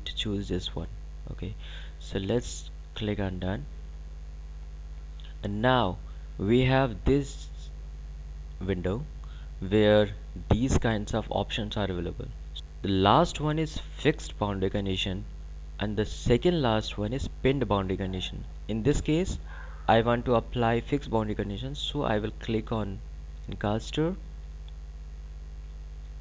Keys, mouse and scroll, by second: 2.8 click, 22.6 click.